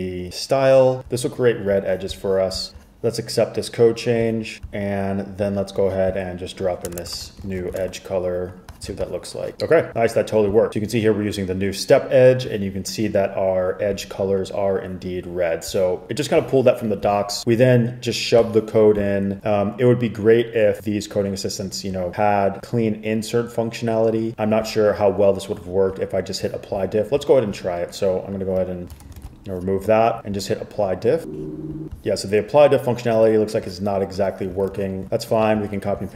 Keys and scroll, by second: 7.0 Return, 7.1 typing, 7.3 super+v, 7.6 super+s, 7.9 super+Tab, 9.0 super+r, 29.1 super+x, 29.3 super+s, 34.7 super+z, 35.7 super+s.